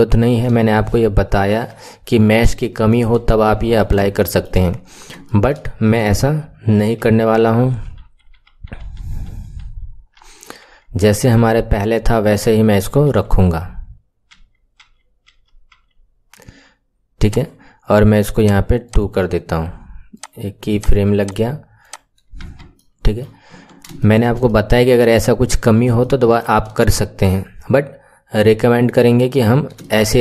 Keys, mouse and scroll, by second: 2.1-2.5 scroll down 2, 2.5-6.8 shift+middle drag, 6.8 ctrl+z, 7.1 ctrl+z, 7.5 ctrl+z, 7.7 ctrl+z, 7.9 ctrl+z, 8.3 ctrl+z, 8.7 ctrl+z, 8.9 ctrl+z, 9.3 ctrl+z, 9.6 ctrl+z, 10.3 ctrl+z, 10.8 ctrl+z, 11.1 ctrl+z, 11.3 ctrl+z, 11.9 ctrl+z, 12.3 ctrl+z, 12.6 ctrl+z, 12.9 ctrl+z, 14.3 ctrl+z, 14.8 ctrl+z, 15.3 ctrl+z, 15.8 ctrl+z, 17.1 click, 18.3-18.9 drag, 20.1 click, 20.6 click, 21.7 click, 22.4 Tab, 22.7 middle click, 23.4 KP_1, 23.9-25.1 shift+middle drag, 25.1-25.9 scroll up 6, 25.9-28.9 shift+middle drag, 29.0 KP_1, 29.1-29.7 scroll down 2, 29.7 shift+middle click.